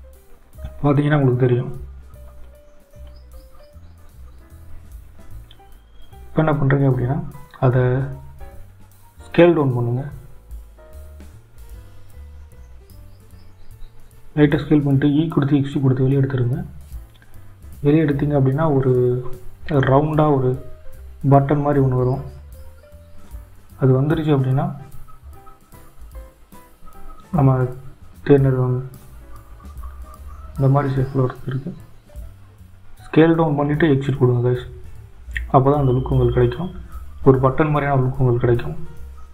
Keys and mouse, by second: 9.9 shift+z, 10.6 i, 18.5 e, 23.2 shift+z, 30.8 click, 32.5 Tab, 38.7 n.